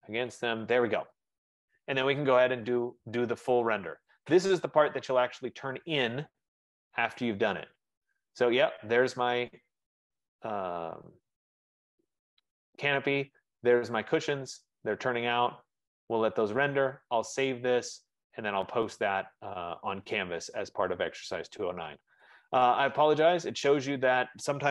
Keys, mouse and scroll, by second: 0.8 right click, 1.6 Escape, 1.7 Escape, 3.9 F15, 4.2 click, 6.7-9.2 drag.